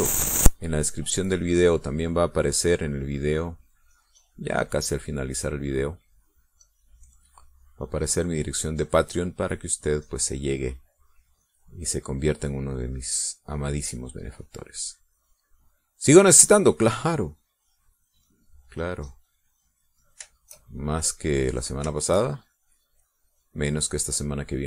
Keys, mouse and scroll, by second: 1.4-6.8 drag, 7.1-10.9 drag, 11.0 middle click, 11.9-15.5 drag, 15.7-16.8 drag, 17.6-20.8 drag, 21.1 shift+click, 21.5 shift+click, 22.8 shift+click, 23.2-24.6 shift+drag.